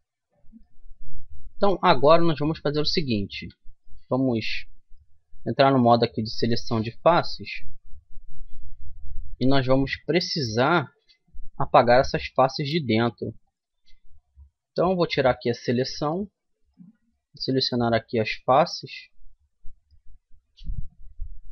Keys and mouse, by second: 0.0-0.4 typing, 0.1-1.5 middle drag, 1.6 Tab, 3.0 Tab, 3.6 middle click, 4.1 right click, 4.1 middle click, 4.3 right click, 4.5 middle click, 7.2-9.4 middle drag, 9.6 middle click, 10.7-12.7 middle drag, 13.1 middle click, 14.0 click, 14.8-21.4 middle drag, 21.4 right click.